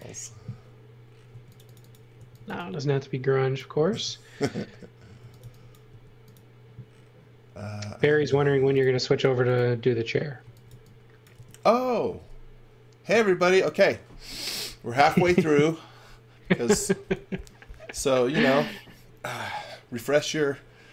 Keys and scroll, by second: 1.3 space, 2.1 x, 2.5 v, 4.9-5.9 typing, 10.2-11.3 typing.